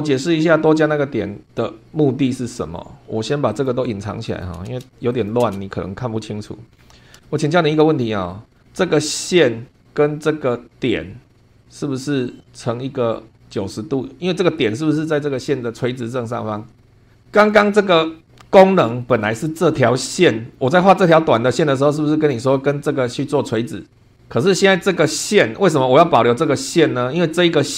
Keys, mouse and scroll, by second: 0.7 click, 1.5 click, 2.1-3.1 scroll up 3, 3.5 click, 4.3 click, 4.6 space, 5.1 click, 5.4 space, 6.2 click, 6.8 scroll down 1, 7.2 shift+click, 8.3 click, 11.5 scroll down 1, 11.6-13.3 drag, 17.1 scroll down 1, 17.2 shift+click, 17.3 shift+middle click, 17.9 shift+scroll up 1, 19.0 shift+middle click, 25.5 scroll up 2.